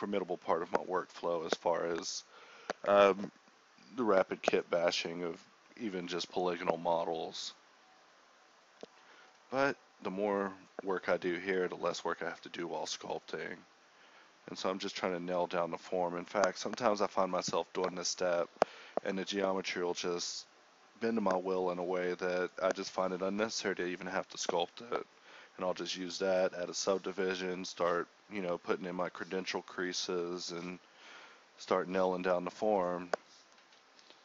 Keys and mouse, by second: 0.4 a, 0.7 k, 2.0-5.1 typing, 2.3 click, 3.6 click, 4.8 click, 5.9-7.0 middle drag, 7.0-9.8 typing, 7.3 Tab, 7.6 Tab, 10.2-11.2 middle drag, 11.2 a, 11.6 k, 13.0-14.3 typing, 16.3 a, 16.5 k, 17.8 click, 17.9 alt+m, 18.6-25.6 typing, 18.9 Tab, 19.4 Tab, 19.7 right click, 20.3 right click, 21.3 right click, 25.1 click, 25.8 click, 27.1 click, 27.2 f, 27.8 f, 28.1 f, 28.5 Tab, 28.7 z, 29.4 Tab, 30.3-32.1 right drag, 30.5-31.6 drag, 32.1 ctrl+z, 32.4 right click, 32.8 f, 33.1 Tab, 33.5 Tab, 33.5 KP_1, 33.6 z, 33.8 Tab.